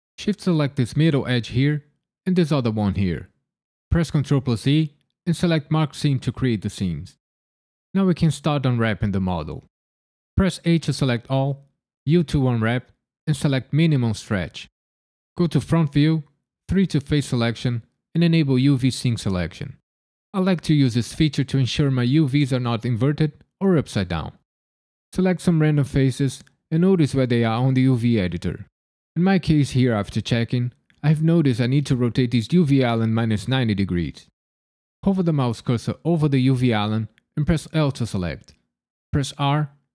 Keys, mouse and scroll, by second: 0.5 shift+click, 0.8 middle click, 2.9 shift+click, 4.6 ctrl+e, 10.3 a, 12.0 u, 15.4 KP_1, 16.7 3, 19.2 click, 20.7-22.5 scroll up 4, 25.0 click, 25.9 click, 26.8 click, 27.7 click, 37.7 l, 39.3 r.